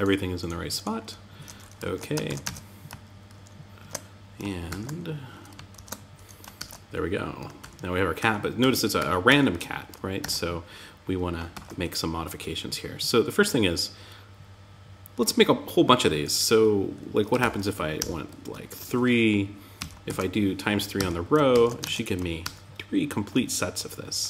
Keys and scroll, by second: 1.6 super+s, 1.8 super+Tab, 3.1 super+1, 4.0 super+r, 5.1 alt+super+j, 5.9 super+r, 9.5 super+Tab, 10.9 super+z, 16.7 shift+8, 19.1 Down, 19.4 super+Right, 20.3 Tab, 20.9 super+s, 21.2 super+Tab, 21.8 super+r.